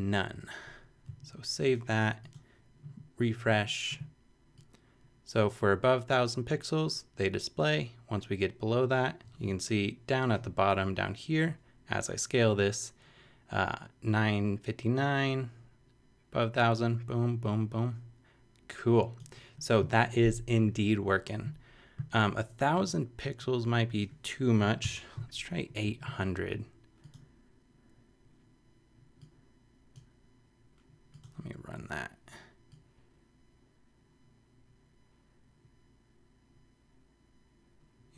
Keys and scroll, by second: 0.0-0.3 typing, 0.3 super+;, 0.8 super+;, 24.8 8, 25.8 super+8.